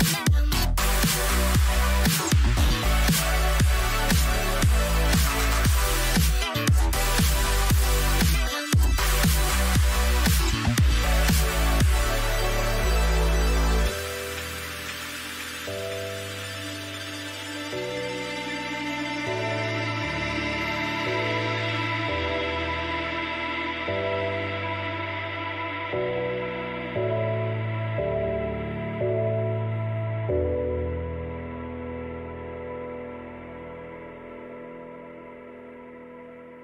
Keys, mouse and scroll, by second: 0.9-3.0 drag, 4.4-7.4 drag, 8.0-12.9 drag, 12.4-16.3 middle drag, 12.9-15.6 right drag, 13.1 a, 14.6 Delete, 17.3-20.8 right drag, 20.8 middle click, 23.1 Tab, 25.0 a, 27.6-29.1 middle drag, 33.4-35.6 middle drag.